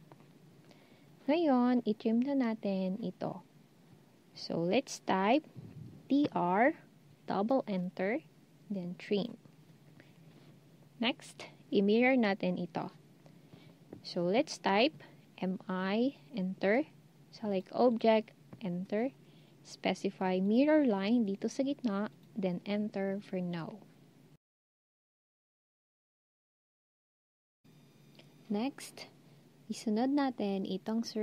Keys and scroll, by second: 5.8-6.6 typing, 15.2-15.9 typing.